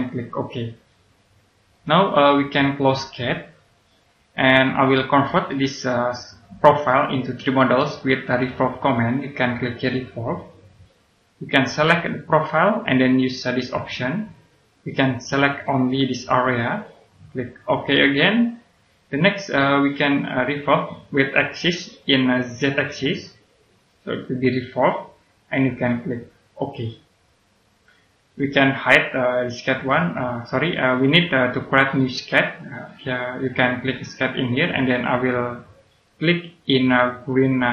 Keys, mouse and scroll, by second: 1.2-1.6 scroll down 1, 2.3-3.5 scroll down 1, 3.5 click, 4.6 middle click, 6.6 right click, 8.7 middle click, 10.3 click, 23.6 click, 26.5 click, 27.9-28.2 scroll down 1, 32.2 click, 33.0 right click, 34.4 click, 35.2 right click.